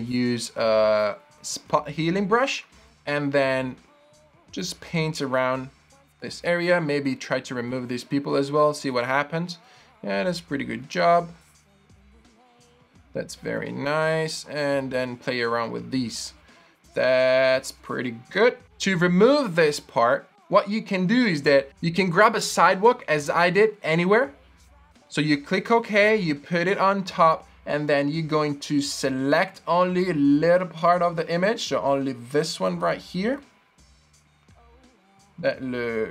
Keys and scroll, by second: 24.7 Return.